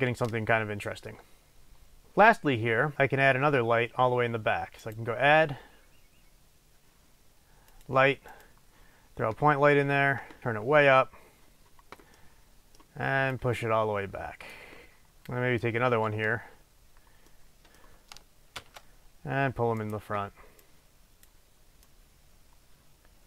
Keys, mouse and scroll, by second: 4.8-12.2 drag, 12.2-13.3 middle drag, 13.3-15.3 drag, 15.3 middle click, 15.8 scroll down 1, 16.0-17.3 middle drag, 17.5-18.8 middle drag, 18.8 shift+d, 20.0 click, 20.8-23.2 drag.